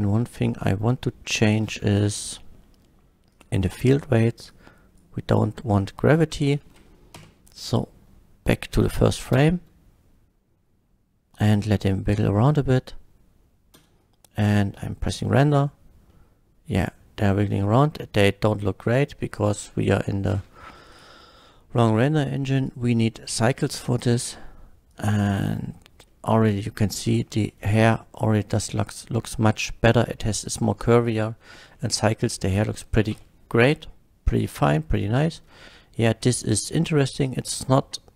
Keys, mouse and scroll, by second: 1.3 click, 1.6 middle click, 3.3 click, 3.6 scroll up 1, 4.5-5.0 drag, 5.4-6.0 middle drag, 7.2 shift+Left, 9.3 space, 14.4 F12, 16.2 middle click, 19.4 click, 20.2 scroll up 1, 20.9 click, 21.9 click, 22.6 click, 23.3 click, 24.0 click, 24.9 click, 26.0 middle drag, 26.6 middle drag, 27.2 shift+middle drag, 29.2 shift+middle click, 31.7-32.5 middle drag, 33.2 F12, 34.4 F12, 34.5 middle drag.